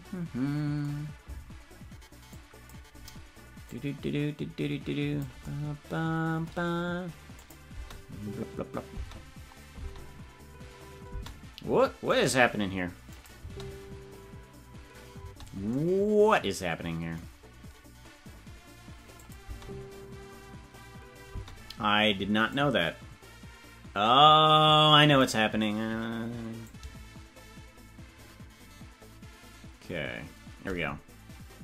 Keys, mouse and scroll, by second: 2.4-5.2 drag, 7.4 click, 7.7 space, 12.3 right click, 13.1 click, 13.3 space, 19.2 click, 19.4 space, 22.6 click, 26.6-30.7 drag.